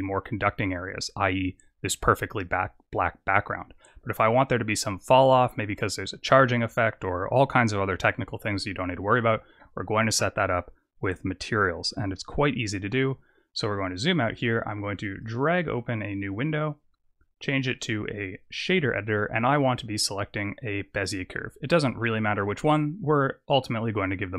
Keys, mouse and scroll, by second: 4.0-7.1 scroll up 6, 12.9-13.5 scroll down 3, 13.5-15.2 scroll down 3, 15.2 click, 15.2-15.5 scroll down 1, 17.5 click, 21.5 click.